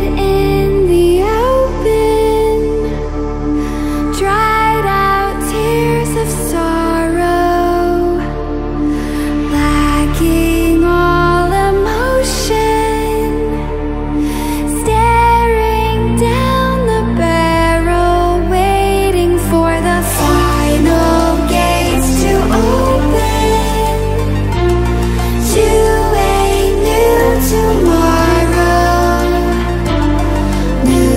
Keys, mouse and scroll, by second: 3.7 ctrl+w, 6.8-21.2 drag, 21.2 ctrl+w, 23.2 ctrl+w, 25.0-29.3 alt+shift+drag.